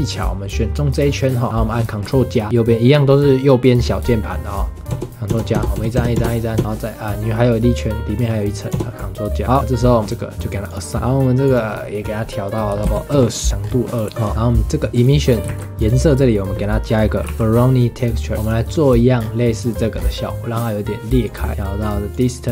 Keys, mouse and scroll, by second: 0.5 click, 1.3-3.9 middle drag, 4.9 ctrl+KP_Add, 5.3 ctrl+KP_Add, 5.5 ctrl+KP_Add, 5.7 ctrl+KP_Add, 5.9 ctrl+KP_Add, 6.1 ctrl+KP_Add, 6.5 ctrl+KP_Add, 6.7-8.7 middle drag, 8.7 ctrl+KP_Add, 9.4-10.6 middle drag, 10.6 click, 11.0 Tab, 11.4-13.6 drag, 13.6 scroll down 3, 13.7 middle click, 14.0 middle click, 14.9 click, 15.4 shift+a, 19.2 scroll down 5, 19.9 scroll up 4, 21.2 click, 21.5 middle click, 21.5-22.5 drag.